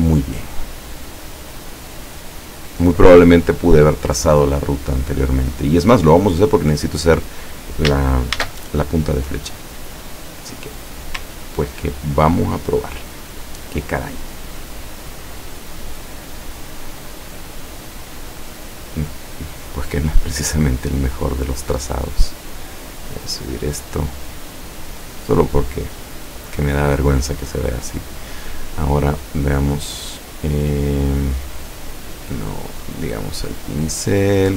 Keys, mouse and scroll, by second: 0.8 click, 2.2 click, 6.6 click, 8.4 ctrl+shift+a, 10.7 click, 13.4 click, 15.4 click, 17.3 click, 18.2 click, 19.2 click, 22.9 click, 27.5 click, 28.8-30.0 drag, 31.5 click, 33.0 click, 34.2 click.